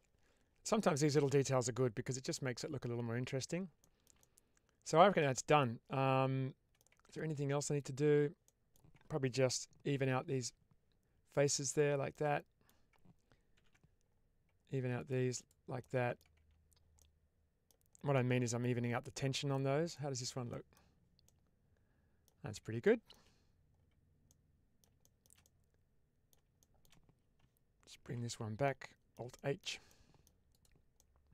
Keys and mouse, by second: 1.3-3.3 middle drag, 3.7 shift+middle click, 4.1-6.6 middle drag, 6.8 Tab, 7.7 Tab, 8.4 middle click, 9.8 ctrl+r, 11.6 click, 12.0 middle click, 13.4 ctrl+r, 15.3 click, 15.7 middle click, 16.3 Tab, 16.9-17.6 middle drag, 18.0-19.4 middle drag, 20.4 middle drag, 21.1-22.1 middle drag, 22.8 shift+middle drag, 24.2-24.7 middle drag, 24.9 shift+middle drag, 25.3-26.2 middle drag, 26.5 shift+middle click, 28.5-29.0 middle drag, 29.4 shift+middle drag, 29.8-30.1 middle drag, 30.4 click, 30.8-31.3 middle drag.